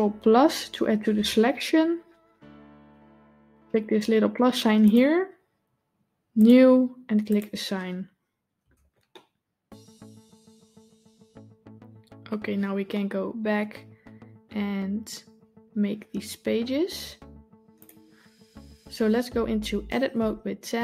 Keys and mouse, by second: 0.6 ctrl+KP_Add, 6.2 click, 7.1 click, 8.5 Tab, 9.0-12.2 middle drag, 12.8-13.4 middle drag, 20.0 Tab.